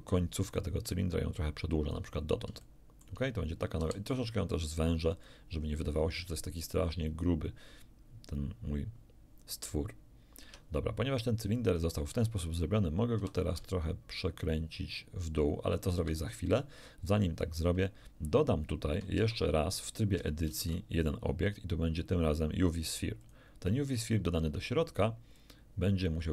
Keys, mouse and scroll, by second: 0.6-2.1 drag, 2.2 ctrl+scroll down 2, 2.6 ctrl+shift+middle click, 2.7 ctrl+shift+click, 3.0 shift+middle click, 3.8 shift+s, 5.1 click, 5.6-5.9 scroll up 2, 10.4 Tab, 13.2 r, 16.0 ctrl+Escape, 19.2 shift+Tab, 20.5 shift+a, 23.2 click, 25.4-26.3 drag.